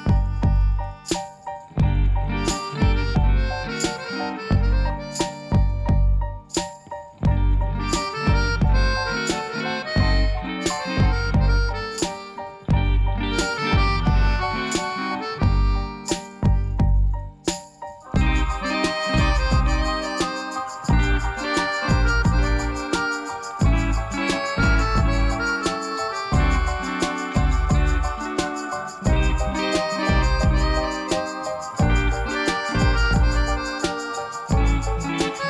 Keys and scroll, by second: 1.4 i, 17.5 g, 20.0 g, 29.4 i.